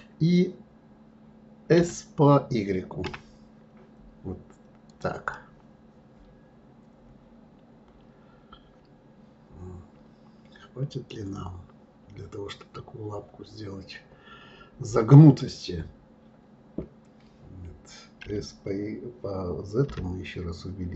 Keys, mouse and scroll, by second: 5.3-8.3 middle drag.